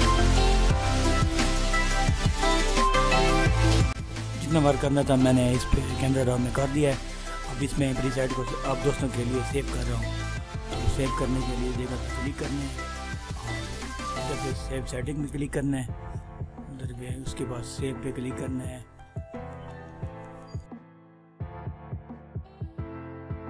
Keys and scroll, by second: 0.2 ctrl+-.